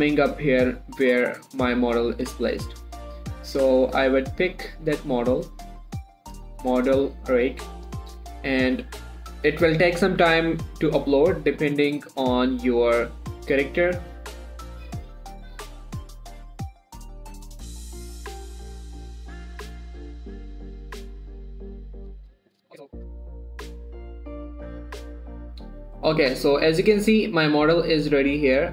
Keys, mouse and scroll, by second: 0.4 scroll up 1, 2.1 scroll down 1, 5.3 scroll up 1, 6.6 click, 14.8 click, 20.9 click.